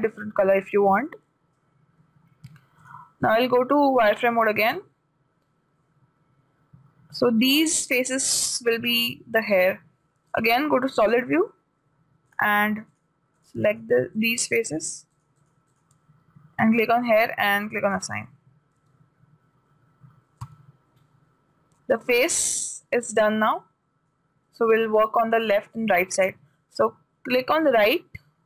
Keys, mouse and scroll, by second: 3.2-9.6 drag, 10.7-12.6 drag, 12.8-17.9 right drag, 17.4-20.3 drag, 19.4 a, 20.9 a, 22.8-25.6 middle drag, 28.0 click.